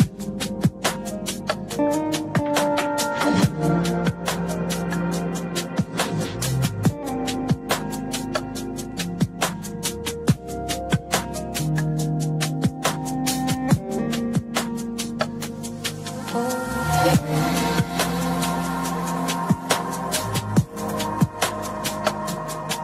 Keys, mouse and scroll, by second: 3.5 s, 4.0 s, 4.2-4.5 s, 4.5 click, 4.6 s, 5.3 click, 7.3 click, 9.3 click, 10.6 drag, 12.0-13.2 s, 13.2 click, 13.3 s, 13.3 s, 13.3 s, 14.5-16.3 drag, 18.5 click, 21.4-22.8 s.